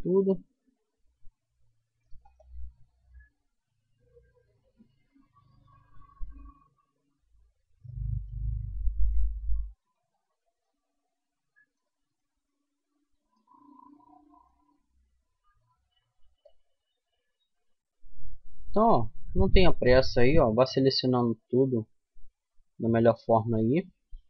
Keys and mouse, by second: 7.4-9.4 middle drag, 9.0 c, 9.4 click, 11.3-13.1 drag, 13.1-15.8 middle drag, 15.0 c.